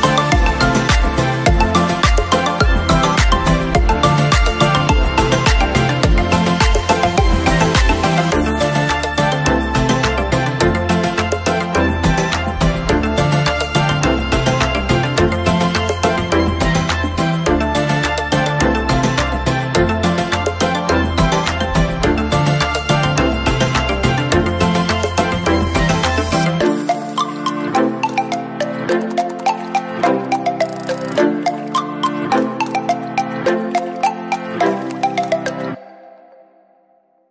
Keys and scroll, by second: 23.4 ctrl+-, 34.3 ctrl+=.